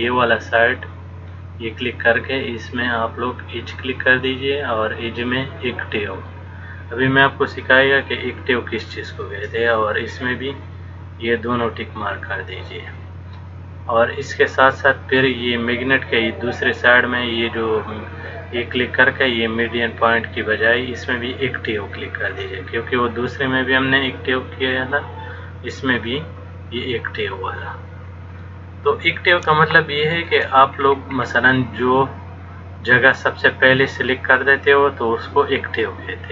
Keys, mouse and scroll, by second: 1.3 click, 16.7 click, 26.4 click, 29.7 shift+middle click, 30.9-31.8 scroll down 5, 32.0 click.